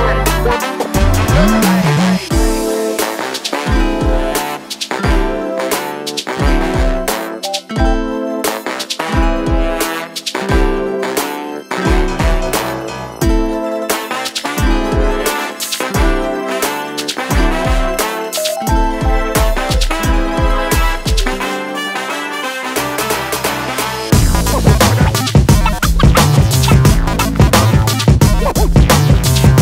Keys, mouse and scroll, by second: 0.6 click, 6.0 click, 14.0 click, 18.8 middle click, 22.0-22.6 scroll up 2, 23.1 shift+middle click, 24.7 scroll up 1, 25.0 middle click.